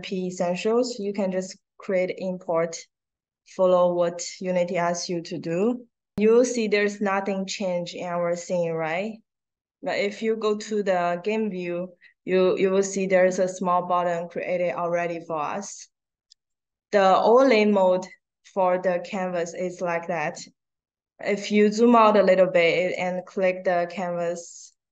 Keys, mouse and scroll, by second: 5.4 click, 10.0 click, 16.2 click, 18.4 click, 21.0-22.1 scroll down 1, 24.6 click.